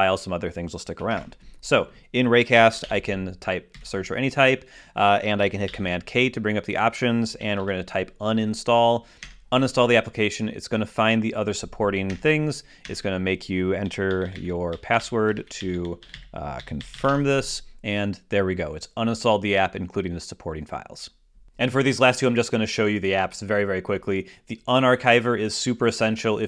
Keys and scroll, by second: 1.1 alt+space, 2.3-3.3 typing, 3.7 Down, 5.7 super+k, 7.1-8.1 typing, 9.2 Return, 12.1 Return, 17.1 Return.